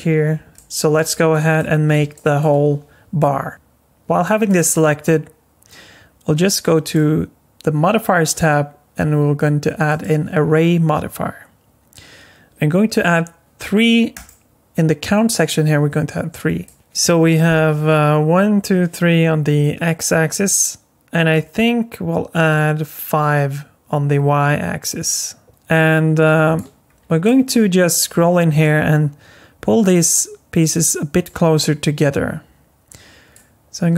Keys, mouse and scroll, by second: 0.2-0.5 scroll down 2, 0.5 middle click, 1.1 shift+middle click, 1.6 middle click, 2.1 shift+middle click, 3.5 shift+middle click, 3.5 click, 4.2 shift+middle click, 6.8 click, 8.3 click, 14.1 click, 16.6 alt+middle click, 18.7 middle click, 19.7 middle click, 24.3 middle click, 25.5 click, 26.8 scroll up 2, 27.2 middle click, 28.2 scroll up 3, 28.6 middle click, 33.3 click.